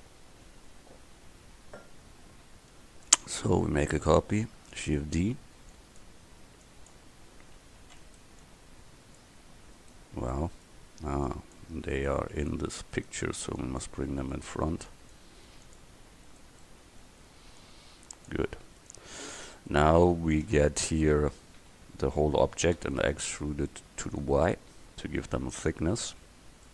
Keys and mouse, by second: 0.7-3.1 middle drag, 4.8 shift+d, 5.8-6.7 drag, 7.9 shift+d, 9.8-10.4 right drag, 10.4 drag, 11.3 right drag, 12.0-13.0 right drag, 13.0 click, 13.6-15.0 right drag, 15.5 x, 16.0 right click, 16.7 middle click, 16.9 click, 17.0 middle click, 17.1-19.5 drag, 17.6 right click, 19.0 right click, 19.5-20.5 middle drag, 20.5 Tab, 21.4 a, 21.6 a, 22.8 e, 26.3 Tab.